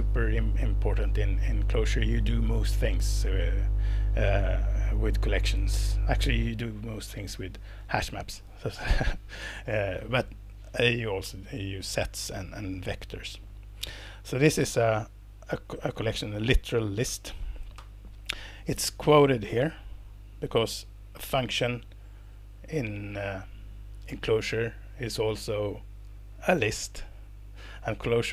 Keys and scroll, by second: 15.6 Left, 17.8 alt+Return, 18.5 Escape.